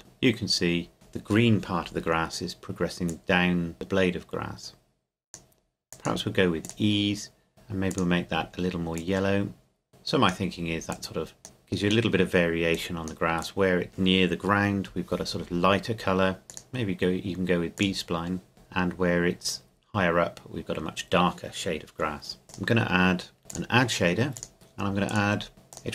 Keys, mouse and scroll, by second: 3.1 click, 16.5 click, 22.4-22.7 scroll up 1.